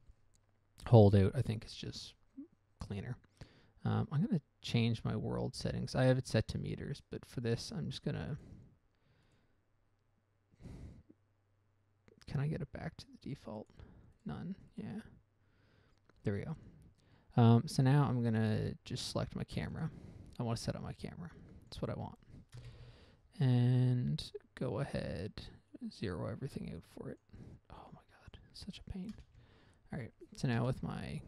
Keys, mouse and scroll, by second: 1.3 n, 5.0 click, 7.8 click, 8.7 click, 9.6 click, 13.6 click, 14.0 double click, 14.5 double click, 15.0 click, 15.1 double click, 18.5 scroll down 1, 18.9 scroll up 1, 19.2-19.8 scroll down 1, 19.8 scroll down 1, 20.1 right click, 20.4-20.7 scroll up 1, 21.0 scroll up 1, 21.7 click, 22.0 click, 22.9 0, 23.0 Return, 26.1 click, 26.5 click, 27.1 click, 27.5 click, 28.6 click, 29.5 0, 29.6 Return, 30.9 0.